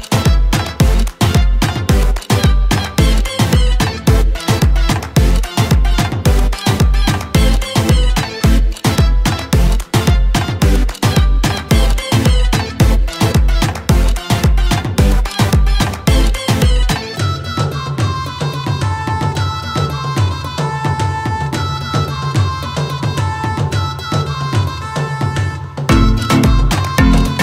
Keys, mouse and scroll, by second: 10.0-11.3 typing, 10.4 click, 11.5 click, 12.3 typing, 13.7-15.8 typing, 16.3 scroll up 2, 16.5 scroll down 2, 17.1 c, 18.1-19.2 typing, 20.6-21.1 typing, 24.1 m, 25.4-27.4 typing.